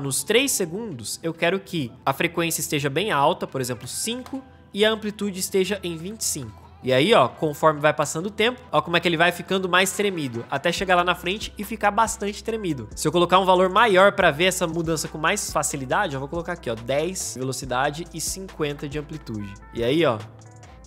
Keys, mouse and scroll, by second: 6.8-8.2 drag, 8.2 space, 14.0 u, 17.4-19.7 drag, 19.7 space.